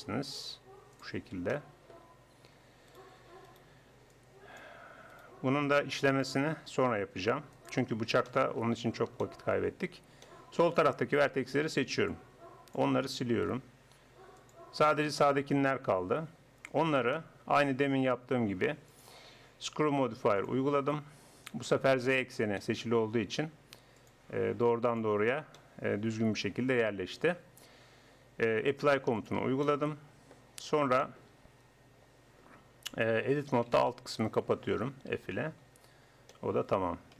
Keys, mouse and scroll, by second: 0.1-1.5 drag, 0.1 g, 2.9 right click, 3.3 click, 3.5-6.9 right drag, 4.1-6.9 drag, 6.7 g, 7.9 middle click, 9.4 middle click, 11.3 a, 11.8 b, 12.0 click, 12.2 middle click, 13.5 x, 15.9 Tab, 18.9-20.6 drag, 22.7-25.3 middle drag, 25.3 click, 25.6-26.8 middle drag, 26.9 KP_1, 28.7 middle click, 30.2 click, 32.9 Tab, 35.1 f, 35.7 Tab.